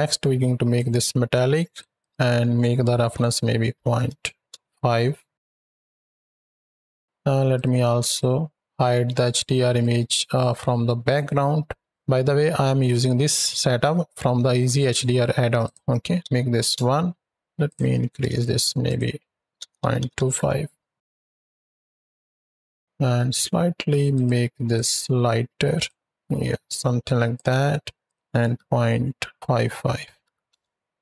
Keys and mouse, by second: 0.6-1.7 drag, 2.0-4.1 drag, 5.8 z, 6.0 click, 6.5 z, 7.4-8.1 drag, 9.0 right drag, 9.6 right drag, 11.2 middle click, 15.5-16.5 drag, 17.5 click, 18.0 KP_1, 18.7-20.3 drag, 21.6-21.9 drag, 22.3 ctrl+drag, 24.0 click, 24.5 click, 27.9-30.3 drag.